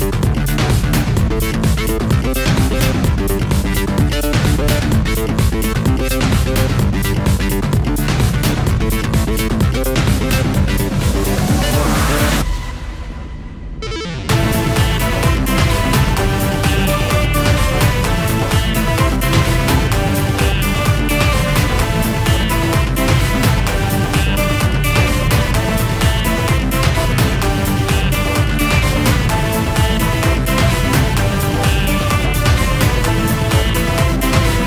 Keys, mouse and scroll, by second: 1.6 click, 2.2 ctrl+click, 3.9 click, 9.2 ctrl+click, 10.3 click, 14.5 click, 15.5 ctrl+a, 15.6 ctrl+c, 16.3 click, 17.6 ctrl+a, 17.6 ctrl+v, 19.3 click, 20.1 click, 20.7 click, 24.4 click, 25.5 click, 26.7 click, 27.3 click, 27.4 click, 28.6 click, 29.0 click, 30.8 click, 31.0 ctrl+a, 31.2-33.0 typing, 33.4 click.